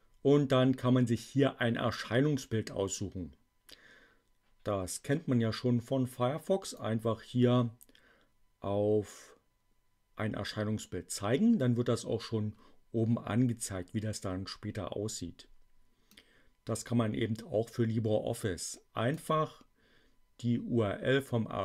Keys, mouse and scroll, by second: 2.9-6.9 drag, 16.0-19.3 drag.